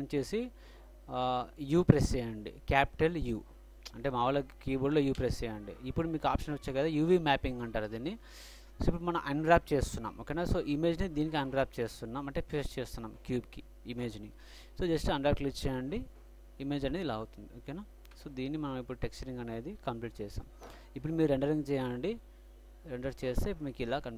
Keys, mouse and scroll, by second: 5.2 u, 18.3 Tab, 19.2 middle click, 21.6 click, 21.7-22.3 middle drag, 22.3 click.